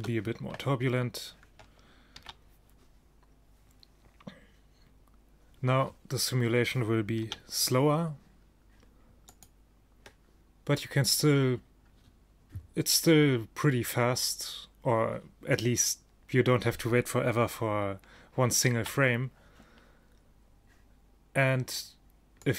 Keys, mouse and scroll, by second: 2.3 alt+a, 7.6 a, 9.8-11.0 drag, 19.1 alt+a, 22.5 click.